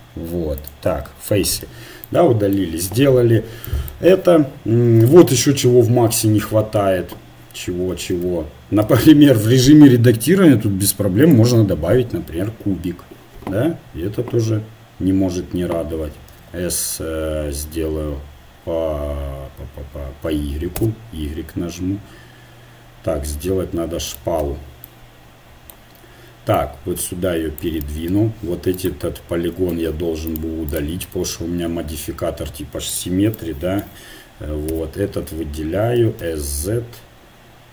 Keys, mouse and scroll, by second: 2.9 KP_1, 4.1 KP_7, 7.9 shift+c, 8.9 shift+a, 16.2 s, 24.9 middle click, 26.5-28.3 drag, 28.8 right click, 29.7 ctrl+Tab, 31.7 x, 34.7 l, 36.0 s.